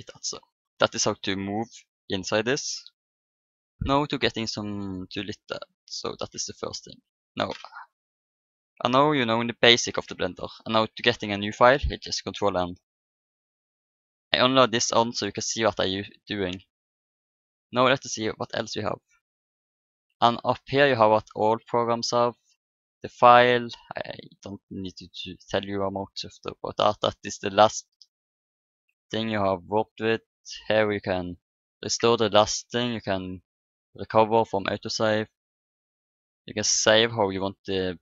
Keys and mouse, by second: 0.9-4.0 middle drag, 9.9 ctrl+n, 16.5 n, 19.5-21.4 drag, 21.4 middle click, 22.0-23.7 drag, 23.7 middle click, 24.6-26.4 drag, 26.4 middle click.